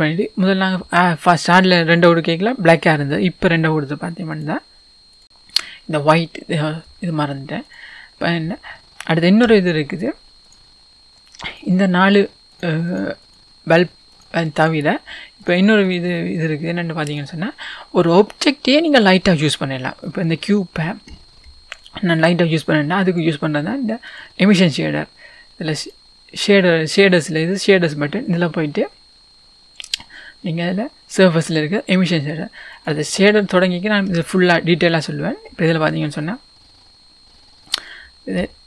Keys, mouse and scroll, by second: 1.9-5.2 scroll up 1, 5.2-10.5 drag, 8.7-9.5 scroll down 2, 9.5-10.4 scroll down 1, 11.5 click, 12.1 click, 12.5 click, 12.9 click, 13.2 click, 13.7 click, 14.1 click, 14.6 click, 15.4 click, 15.9 click, 16.4 click, 17.1 click, 24.2 click, 32.9-38.6 drag, 36.6-37.3 scroll up 1.